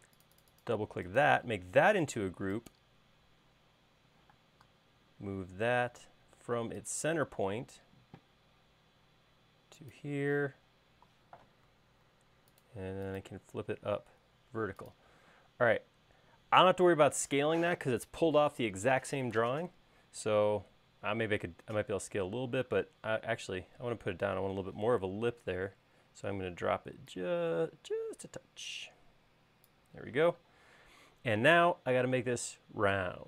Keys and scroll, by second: 4.4 m, 10.5 q, 11.8 Left, 12.1 Right, 15.5 space, 26.1 s, 30.6 space, 32.4 l.